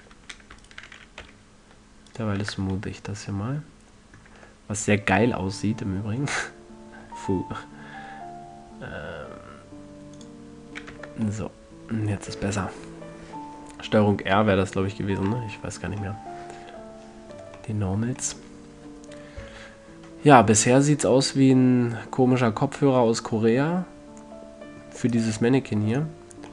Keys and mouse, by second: 1.8 typing, 3.0 Tab, 4.2-5.0 drag, 7.0-9.0 drag, 10.7 click, 11.4 Tab, 12.4 middle click, 13.1-16.0 middle drag, 25.6-26.5 drag.